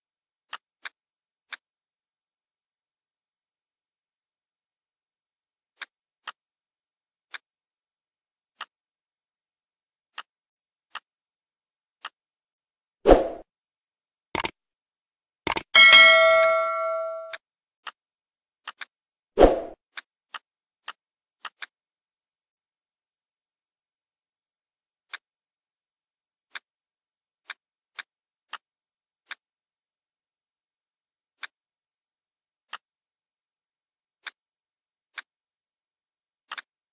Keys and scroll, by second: 10.5 ctrl+z, 20.0 ctrl+z.